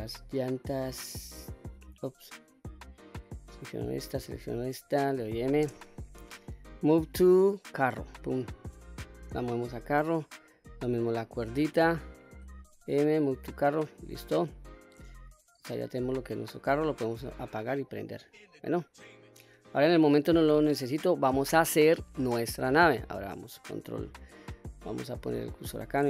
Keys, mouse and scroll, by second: 0.1 click, 1.3 click, 3.7 click, 4.7 shift+click, 5.7 m, 10.0 click, 12.5 m, 15.6 click, 16.5 click, 16.9 click, 17.2 click, 17.6 click, 18.3 click, 18.6 click, 20.6-21.2 middle drag, 25.3 shift+right click.